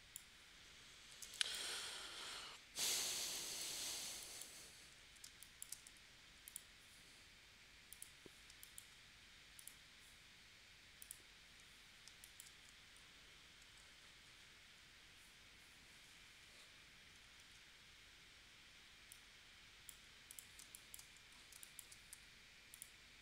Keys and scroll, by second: 1.3 space, 3.2 space, 4.0 space, 5.2 space, 5.9 v, 8.5 space, 12.1 space, 17.4 shift+w, 20.6 space, 21.5 space, 22.1 v.